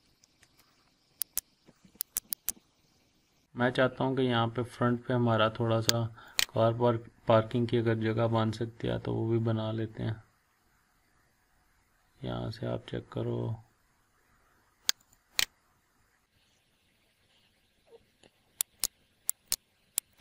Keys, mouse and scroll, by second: 1.2 click, 1.9 Delete, 2.1 click, 2.2 Delete, 2.7 scroll up 1, 2.8 scroll down 1, 2.9 scroll up 1, 3.1 scroll down 1, 3.4 scroll up 1, 3.9-4.6 scroll down 1, 4.6-6.3 scroll up 1, 6.3 click, 15.0 click, 18.8 click.